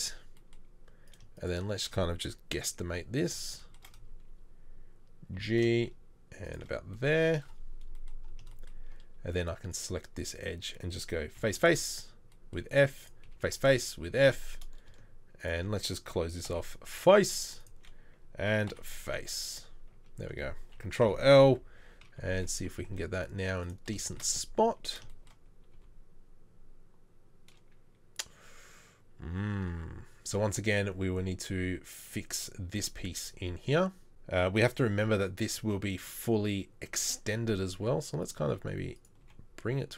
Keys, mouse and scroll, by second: 2.6 KP_3, 5.3 g, 11.3 f, 11.5 f, 13.3 f, 13.5 f, 18.7 f, 21.0 ctrl+l, 21.4 KP_3, 22.7 s, 25.8 g, 37.4 g, 38.4 s, 39.2 g.